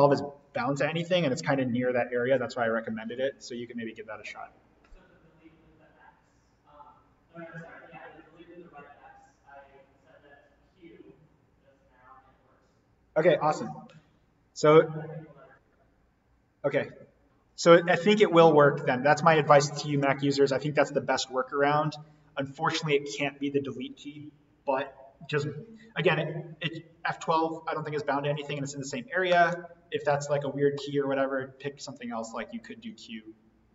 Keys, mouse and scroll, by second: 0.9 Escape, 18.6 click, 19.8 Delete, 19.9 BackSpace, 21.6 click.